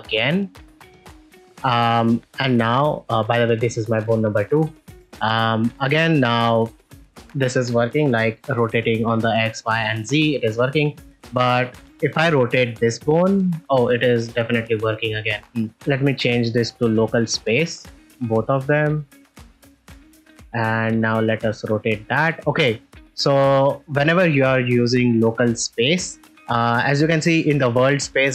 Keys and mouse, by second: 1.4-1.9 shift+middle drag, 2.8 middle click, 3.2-3.5 ctrl+middle drag, 4.4 shift+middle drag, 5.0 ctrl+middle drag, 5.3 middle click, 8.3 r, 8.4 x, 9.3 right click, 9.7 r, 9.9 r, 11.5 click, 12.3 r, 12.4 x, 15.3 middle click, 15.7 r, 16.6-17.4 drag, 17.9-18.9 drag, 20.8 r, 21.0 r, 23.0 middle click.